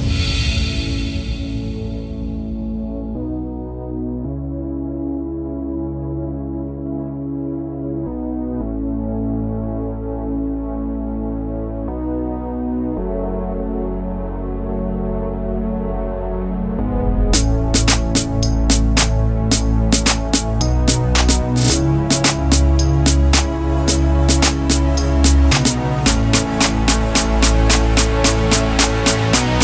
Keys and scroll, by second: 4.2 /, 5.0 5, 5.1 Return, 7.7-9.5 typing, 10.5 ctrl+z, 13.2 space, 18.5 m, 25.7 /, 28.4 3.